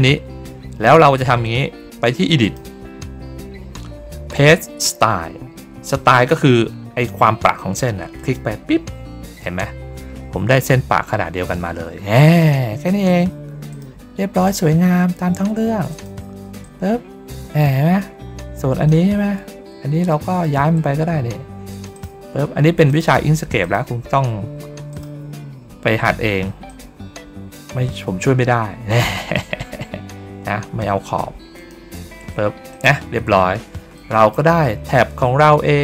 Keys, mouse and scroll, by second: 2.3 click, 8.1 click, 9.8 ctrl+middle click, 9.8 ctrl+scroll up 1, 11.7 ctrl+middle click, 11.7 ctrl+scroll down 1, 13.6 click, 14.3 click, 15.8 ctrl+click, 16.5-18.8 drag, 20.0 middle click, 21.6 click, 21.8 click, 22.8 click, 23.5 ctrl+click, 24.8 click, 26.6 click, 28.8 click, 31.5 shift+click, 32.6 click, 33.2 ctrl+middle click, 33.2 ctrl+scroll up 1, 33.8 middle click, 34.7 ctrl+middle click.